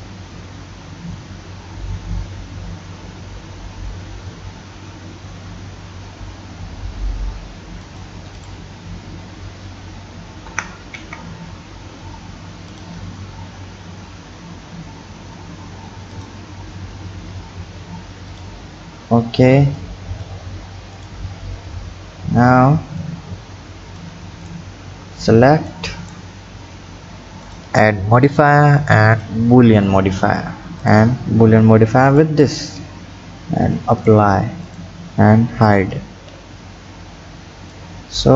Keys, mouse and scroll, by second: 8.4 click, 10.5 g, 13.0-14.1 scroll up 3, 14.1-16.1 scroll down 2, 16.1 click, 18.3 click, 18.7 scroll down 5, 19.8 click, 21.0 click, 21.4-22.5 scroll down 2, 23.0 click, 24.8-25.7 scroll down 2, 25.7-27.5 drag, 28.3-30.9 drag, 34.0 click, 34.7 click, 35.6 h, 36.6 scroll up 3, 37.8-38.3 drag.